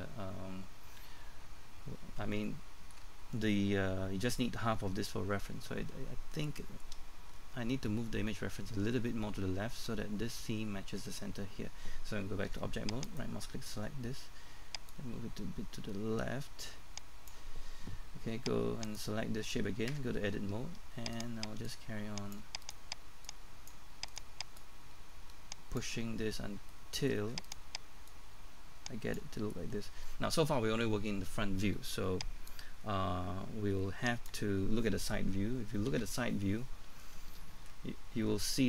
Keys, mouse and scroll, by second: 2.4 shift+middle click, 12.5 Tab, 13.0 right click, 13.7-14.2 scroll down 1, 14.9-17.6 drag, 18.9 right click, 19.9 Tab, 20.4-21.1 scroll up 1, 21.1 right click, 21.7 click, 22.6 right click, 23.3 click, 24.1 right click, 24.6 click, 27.4 right click, 28.1 click, 29.4-31.3 scroll down 1, 32.5-34.9 drag, 35.9 KP_3, 36.6-37.2 scroll down 1, 37.8-38.6 scroll up 1.